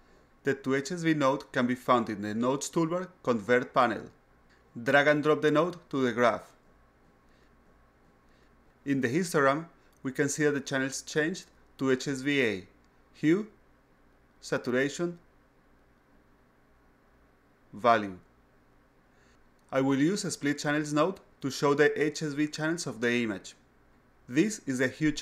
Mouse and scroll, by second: 1.3 click, 5.4-8.3 drag, 14.4 click, 15.3 click, 17.1 click, 18.1 click, 22.1 click, 22.7-24.3 drag.